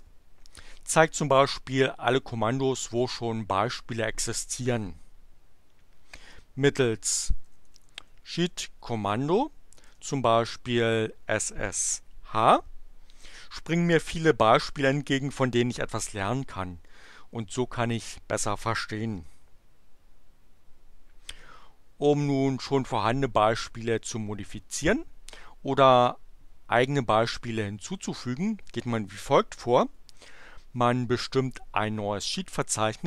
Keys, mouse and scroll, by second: 7.0-8.8 typing, 9.9 BackSpace, 10.6 h, 19.1 Return, 32.5-33.0 typing.